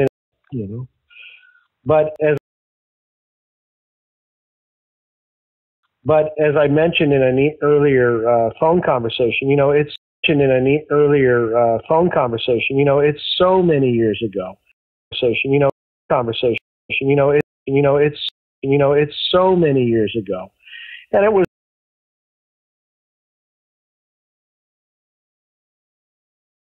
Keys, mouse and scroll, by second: 0.0 space, 0.1 click, 1.6 click, 2.3 space, 2.7-4.9 drag, 5.7 click, 5.7 space, 7.0 ctrl+s, 9.9 space, 10.0 click, 10.1 space, 11.8-13.0 drag, 13.4 click, 14.6-18.5 typing, 15.0 click, 16.0 click, 17.5 click, 18.4 click, 19.0-21.3 drag, 21.3 space, 22.2 ctrl+shift+Delete, 22.9 click, 23.3 click, 24.0 Delete, 24.5 click, 25.3-26.6 drag.